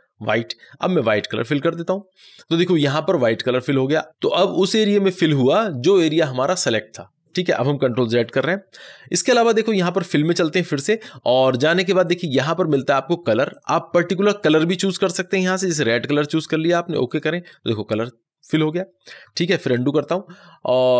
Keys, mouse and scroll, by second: 1.5 click, 9.7 click, 20.9 click.